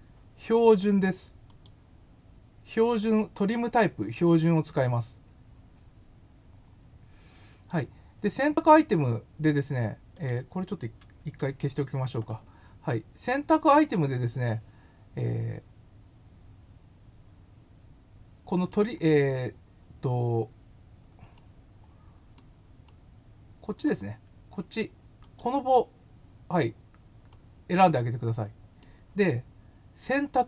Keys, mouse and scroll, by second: 1.4 click, 10.2 click, 13.9-18.7 middle drag, 19.8 scroll up 1, 21.3-22.3 middle drag, 22.8 middle click, 25.2 click, 27.3-28.8 middle drag.